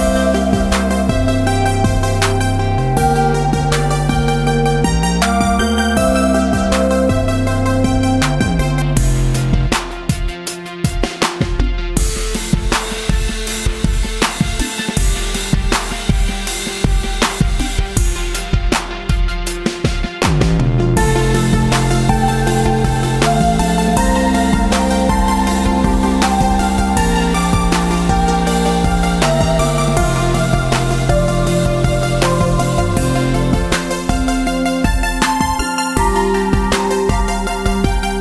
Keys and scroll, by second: 3.1 Tab, 12.1 ctrl+Return, 13.2 v, 19.6 ctrl+-, 19.7 ctrl+-, 20.2 ctrl+d, 20.4 ctrl+d, 20.7-21.5 ctrl+d, 21.7 ctrl+d, 22.4 ctrl+space, 23.6 ctrl+space, 24.0 d, 24.9 space, 27.3 ctrl+g, 27.8 Tab.